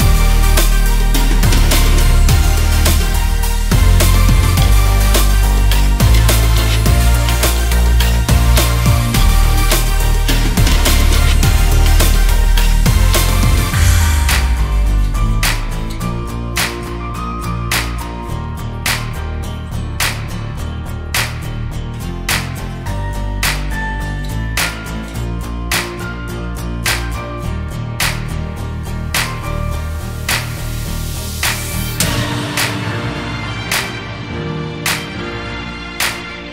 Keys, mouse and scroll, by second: 0.0 click, 0.6 scroll down 3, 2.1-3.1 scroll up 10, 4.2 click, 4.3 scroll down 1, 5.1-6.3 scroll down 9, 6.3 ctrl+z, 6.4 ctrl+z, 7.4 ctrl+z, 8.7 click, 9.6 s, 12.1-12.8 drag, 13.2 click, 13.5 scroll up 2, 13.8 click, 14.1-14.5 scroll down 1, 14.5 s, 16.4 click, 17.1 click, 17.8 click, 18.5-20.5 drag, 21.0-22.3 drag, 23.9 click, 26.2 click, 26.9 s, 27.9 click, 28.2 click, 28.7 click, 29.7 click, 30.9 click, 31.3 s, 32.4 click, 32.9 scroll up 2, 33.6 click, 35.5 click, 36.1 click, 36.4-36.5 right drag.